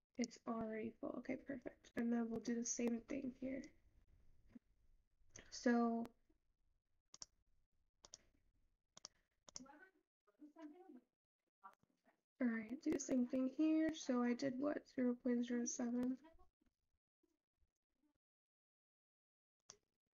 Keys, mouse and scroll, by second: 1.5 click, 1.9 click, 5.3 click, 9.1 click, 15.4-17.5 scroll down 6, 17.5-20.2 scroll down 1.